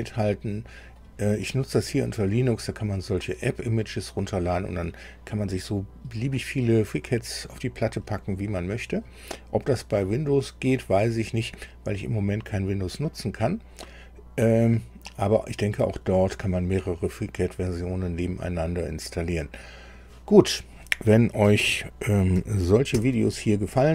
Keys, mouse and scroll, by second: 22.9 super+u.